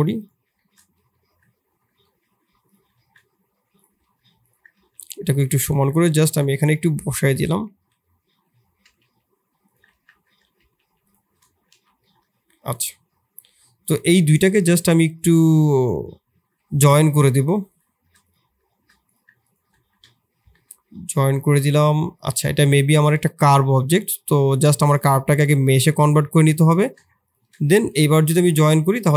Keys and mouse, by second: 0.5 shift+middle click, 1.2 KP_7, 2.0 shift+middle click, 2.9 shift+s, 4.4 drag, 4.7 shift+s, 5.5 middle drag, 6.4 middle drag, 7.3 KP_1, 7.7 KP_3, 8.8 g, 9.9 shift+z, 10.5 g, 11.7 shift+z, 12.0 shift+click, 13.6 drag, 15.1 click, 17.6 shift+click, 19.0 click, 20.4 ctrl+j, 22.1 click, 23.5-28.3 drag, 28.3 ctrl+j.